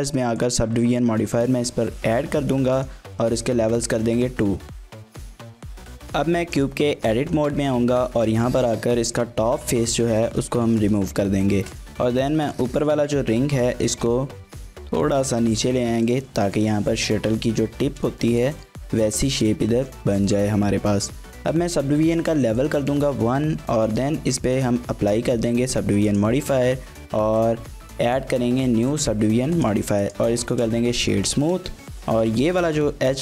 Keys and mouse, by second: 2.8-3.3 drag, 3.6 shift+middle click, 3.9 middle click, 6.9 shift+middle click, 7.2 middle click, 7.4 Tab, 8.3 3, 8.7 click, 9.6 x, 10.7 shift+click, 10.9 click, 11.4 2, 12.1 middle click, 13.2 KP_1, 13.8 g, 14.0 z, 16.0 click, 18.2 shift+middle click, 18.6-19.9 middle drag, 20.4 shift+middle click, 22.6 click, 23.6 Tab, 24.5 ctrl+a, 26.1-27.5 drag, 29.0-29.5 drag, 29.5 right click, 30.5 shift+middle click, 30.9 Tab, 31.1 middle click, 31.8 KP_1.